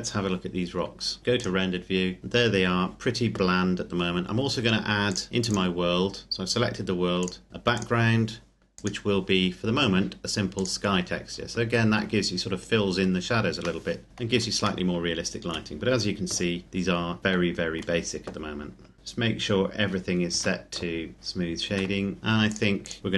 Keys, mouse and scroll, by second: 1.2 click, 2.2-4.0 scroll up 1, 5.1 click, 7.7 click, 13.9 middle click, 14.8 shift+middle click, 18.9 a, 20.4 Tab, 21.1 click, 21.7 Tab, 22.2 click.